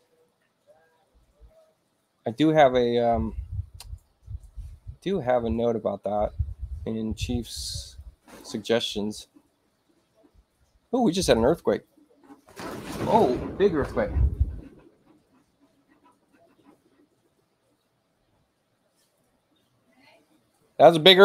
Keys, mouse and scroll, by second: 8.3 click.